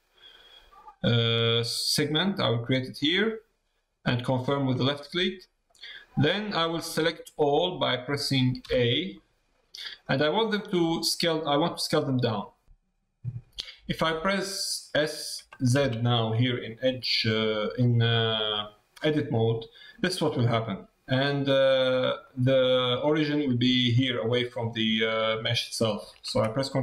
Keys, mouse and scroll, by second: 5.0 middle click, 6.2 middle click, 9.1 middle click, 11.3 middle click, 22.2 middle click, 26.7-26.8 middle drag.